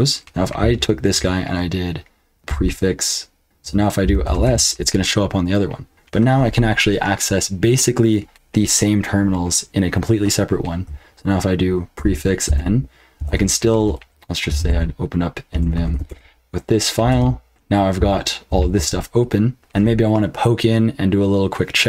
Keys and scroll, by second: 2.5 ctrl+b, 3.8-4.7 typing, 11.9 ctrl+b, 12.4-15.5 typing, 15.8 ctrl+f, 16.0 Return, 17.1 Return, 17.7-19.3 typing.